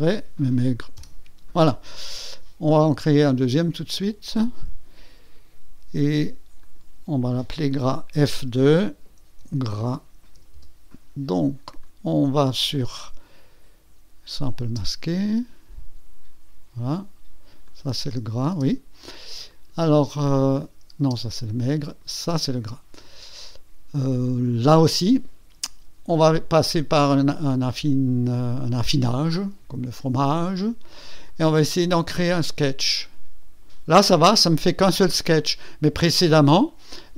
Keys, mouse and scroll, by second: 0.0-0.6 typing, 1.0 Return, 4.0 click, 6.6 click, 8.5 F2, 9.0-10.7 typing, 11.8 click, 14.3 click, 14.7 space, 17.7 click, 18.1 space, 19.5 click, 21.0 space, 21.9 click, 22.2 space, 29.1 click, 31.3 click, 33.0 click.